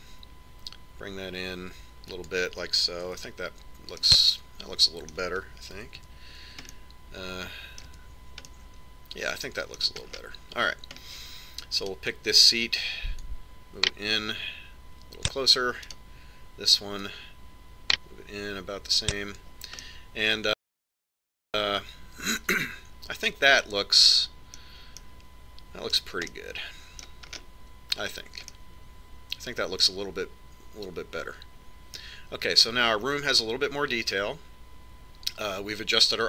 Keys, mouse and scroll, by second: 5.0 Tab, 5.9-7.9 middle drag, 7.9 KP_5, 8.6 middle click, 9.8 KP_5, 13.8-15.6 right drag, 15.2 click, 18.0-19.8 right drag, 19.0 click, 21.8-23.6 middle drag, 26.0-31.3 middle drag, 33.0-34.9 middle drag.